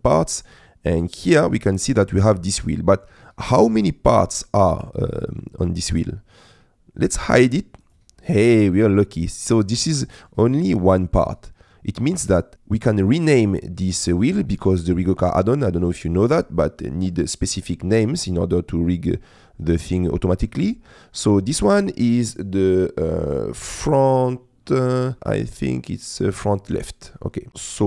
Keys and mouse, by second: 1.2 click, 2.5 middle click, 3.3 middle click, 3.9 shift+middle click, 4.4 middle click, 5.2 middle click, 5.7 middle click, 7.8 click, 8.7 click, 10.0 middle click, 25.2 middle click, 26.8 middle click.